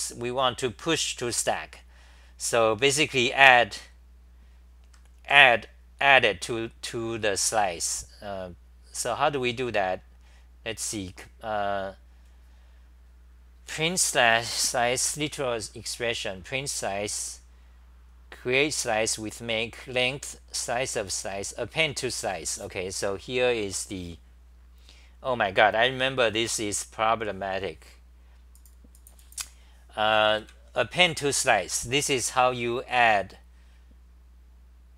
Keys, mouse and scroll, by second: 0.0-20.8 typing.